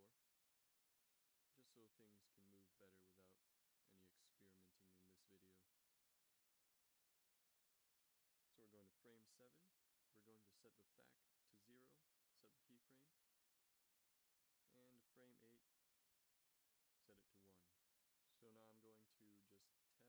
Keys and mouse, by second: 0.0 ctrl+s, 8.2-10.1 middle drag, 12.2-13.6 middle drag, 12.2 i, 13.6 Right, 17.2 i, 19.3 ctrl+s.